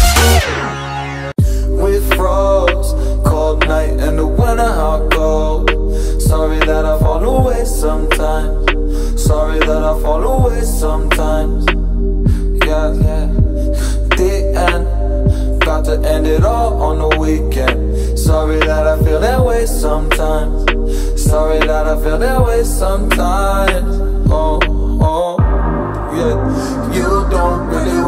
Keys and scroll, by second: 1.3 space, 17.0 ctrl+z, 22.2 Down.